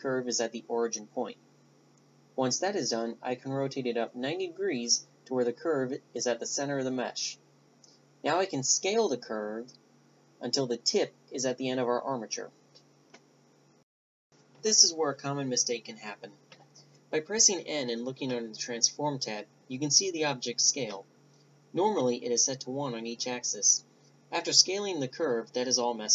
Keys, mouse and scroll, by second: 1.4 r, 8.5-10.3 middle drag, 9.2 KP_5, 10.6 s, 14.0 n, 16.0-18.2 middle drag, 21.5-26.1 right drag.